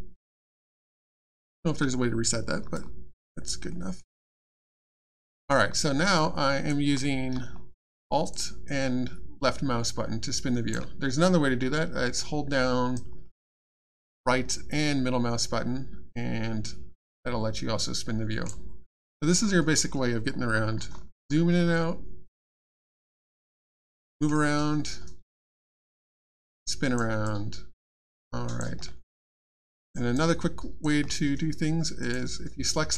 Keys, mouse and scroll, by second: 0.2 ctrl+scroll down 1, 2.7 alt+click, 3.7 alt+middle click, 4.4 alt+click, 6.0 alt+click, 8.3 alt+click, 12.9 right click, 13.2 middle click, 19.1 scroll down 1, 19.4-19.7 scroll up 1, 19.7 scroll down 1, 20.0 scroll up 1, 20.3 scroll down 1, 20.5 scroll up 1, 20.7 scroll down 1, 20.9 scroll up 1, 21.1 scroll down 1, 21.2-21.6 scroll up 1, 21.7 middle click, 25.3 alt+click, 27.2 alt+click, 28.9 middle click, 29.4 alt+click, 32.0 click.